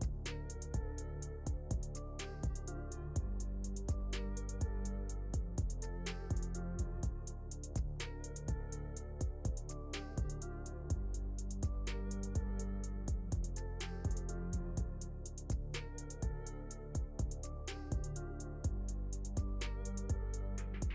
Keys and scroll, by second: 2.7 KP_Add, 10.8 \, 18.6 shift+Page_Down, 20.0 F3.